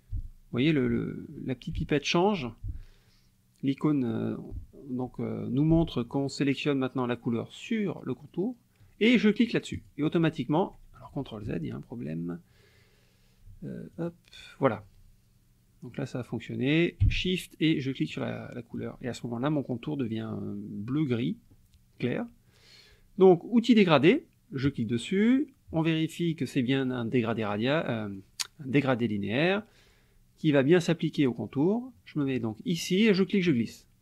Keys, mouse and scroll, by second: 9.7 shift+click, 11.4 ctrl+z, 13.9 shift+click, 18.1 shift+click, 24.7 click, 27.3 click, 33.2-34.0 drag.